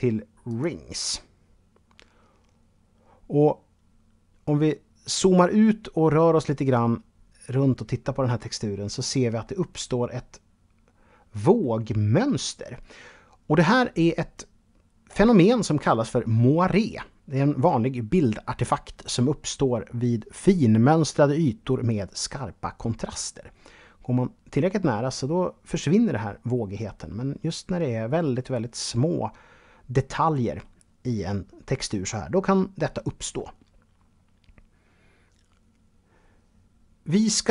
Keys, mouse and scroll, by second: 3.1-4.0 scroll up 2, 4.0-4.7 scroll down 2, 4.7-8.5 middle drag, 8.9 middle click, 11.1-13.1 scroll up 2, 22.5-23.4 scroll up 3, 24.3-26.2 middle drag, 26.2-27.7 scroll down 2, 27.7-29.9 middle drag.